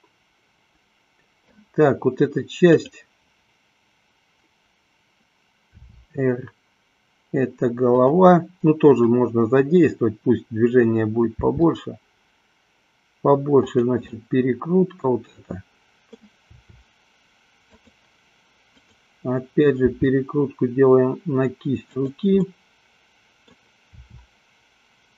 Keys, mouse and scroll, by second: 3.1 click, 5.6 r, 9.2-10.6 drag, 11.6 r, 13.9 click, 14.2-16.3 middle drag, 16.7 r, 18.9-20.2 drag, 20.3 r, 22.7-23.8 middle drag, 24.2 r.